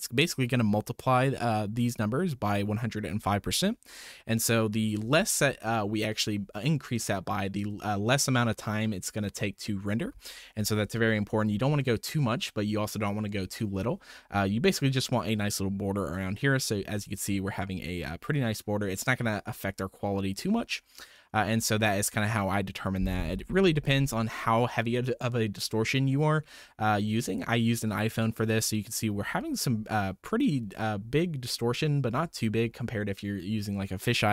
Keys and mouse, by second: 21.0 middle click, 22.2 middle click, 27.2-27.5 middle drag, 28.6 middle click.